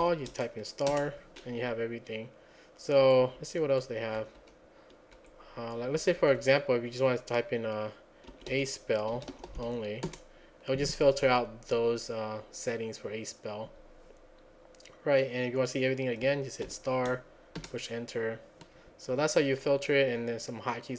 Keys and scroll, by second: 0.0 *, 0.9 Return, 3.1 Page_Down, 3.2 Page_Down, 3.4 Page_Down, 4.2 Page_Up, 4.4 Page_Up, 5.2 Page_Down, 6.0 Page_Up, 6.2 Page_Up, 6.4 Page_Up, 8.1-10.2 typing, 17.6 Return, 17.6 typing.